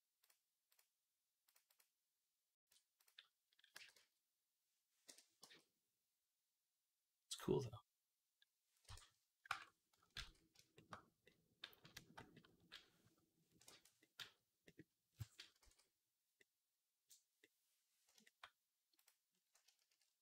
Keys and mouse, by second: 2.5 Tab, 3.6 g, 5.3 g, 9.3 ctrl+Tab, 10.0 ctrl+s, 10.6-12.2 shift+middle drag, 12.2 click, 13.9-15.4 drag, 15.4-18.8 ctrl+middle drag, 15.5 ctrl+s, 18.8 click, 18.9-20.2 middle drag.